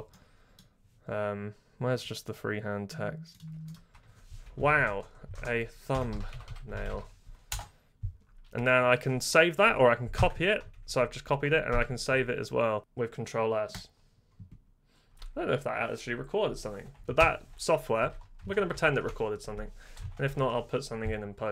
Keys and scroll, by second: 4.3-7.4 typing, 7.4 Return, 8.2 Print, 10.1 ctrl+c, 11.5 Print, 11.6 ctrl+s, 17.1 super+Return, 18.0 super+w, 18.5 ctrl++, 18.7 ctrl++, 18.8 ctrl++, 20.2 ctrl++, 20.3 ctrl++.